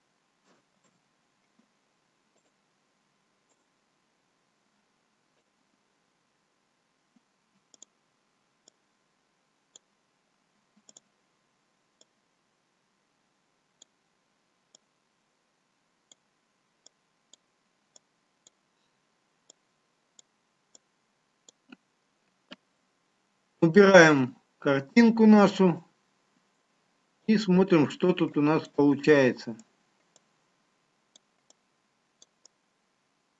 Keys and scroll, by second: 4.7 ctrl+z, 27.9 shift+z.